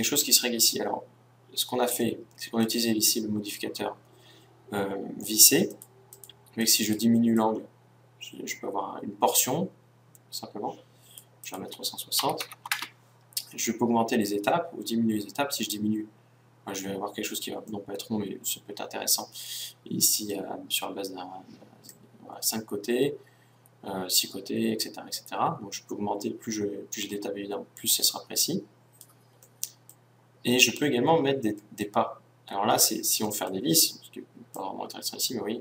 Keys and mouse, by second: 5.7-9.2 drag, 11.5-13.3 drag, 14.4-16.3 drag, 17.8 middle click, 19.6-20.9 middle drag, 21.9-23.8 drag, 29.5-34.5 middle drag, 34.5-35.6 drag.